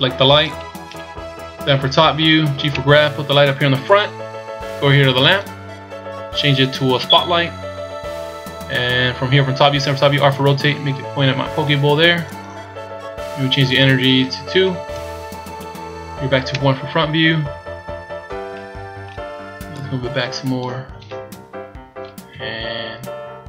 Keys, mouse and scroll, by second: 0.4 right click, 1.4 KP_7, 2.7 g, 5.2 click, 7.0 click, 10.1 r, 13.7 click, 16.5 KP_1, 17.3 scroll up 1, 18.5 middle click, 19.7 click, 22.3 KP_3.